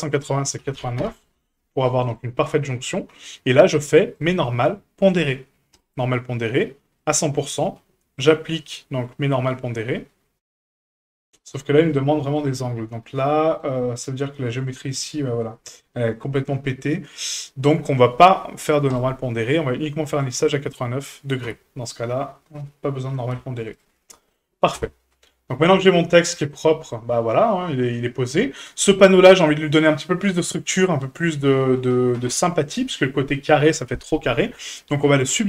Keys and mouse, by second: 0.3-1.5 drag, 1.8 middle drag, 4.1-5.8 drag, 7.0 click, 11.6 shift+middle click, 11.9 middle click, 12.6 Tab, 13.2 middle click, 14.3 shift+middle click, 15.4-16.4 shift+middle drag, 20.1 click, 21.4 Tab, 22.4-23.1 middle drag, 23.3 a, 24.0 middle drag, 24.7 KP_1, 26.3 middle drag, 26.9-27.9 middle drag, 28.6 right click.